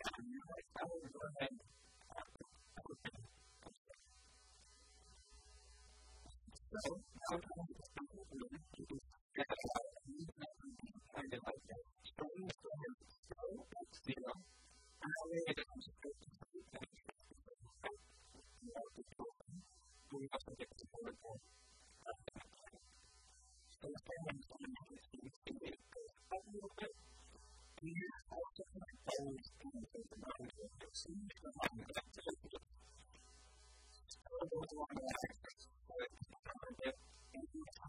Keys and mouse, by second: 1.3-3.0 drag, 3.0 n, 3.6 n, 4.1 t, 4.7 middle click, 5.4 Tab, 5.6 Tab, 6.3 Tab, 7.4 Tab, 7.7-9.6 typing, 9.1-10.9 drag, 10.8 r, 13.1 s, 21.0-22.8 drag, 26.6 middle click, 27.5 KP_7, 28.0-30.7 shift+middle drag, 30.7 ctrl+r, 32.7-33.9 drag, 32.7 s, 35.1 click, 35.3 a, 35.5 b, 36.3 b.